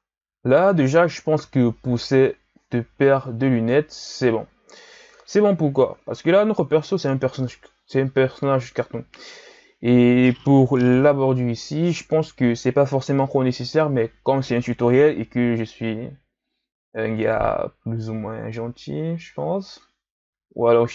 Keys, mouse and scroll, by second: 1.3 KP_1, 3.1-4.3 scroll down 2, 4.3-6.2 shift+scroll down 2, 6.2-9.4 shift+scroll up 1, 11.6 KP_3.